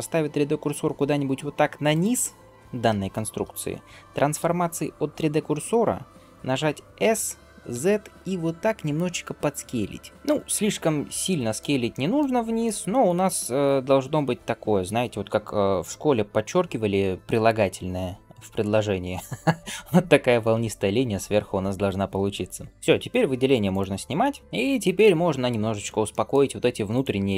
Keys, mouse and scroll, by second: 1.7 shift+right click, 10.1-11.4 middle drag, 11.7 shift+middle click, 12.5 middle click, 13.2 shift+middle click, 13.7 middle click, 23.5 click, 24.2 middle click, 24.5-25.2 scroll up 2, 25.2-25.5 scroll down 1, 25.6 scroll up 1, 26.0 middle click, 26.8 alt+click, 27.2-27.3 scroll down 1.